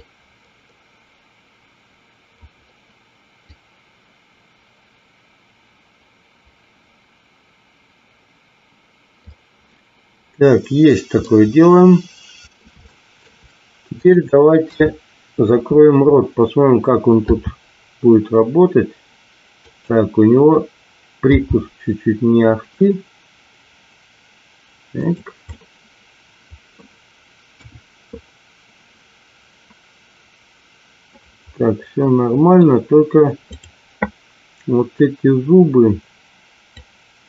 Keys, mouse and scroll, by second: 0.0-2.5 drag, 3.4-9.3 drag, 11.1-12.5 middle drag, 12.8 shift+middle click, 13.9-14.9 drag, 15.0 KP_3, 17.4 r, 21.5 g, 25.4-26.6 middle drag, 27.5 KP_1, 31.1-32.6 middle drag, 33.4-34.5 drag, 36.6-37.2 drag.